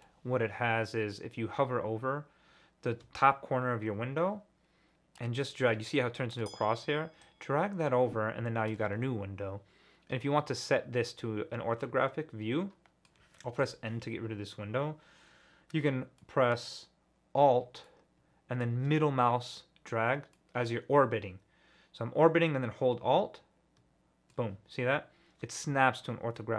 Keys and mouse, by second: 7.2-8.6 drag, 8.6 middle click, 11.4-13.2 middle drag, 13.6 n, 16.2-16.7 drag, 20.3-21.3 middle drag, 21.9-22.9 middle drag, 22.9-24.3 alt+drag.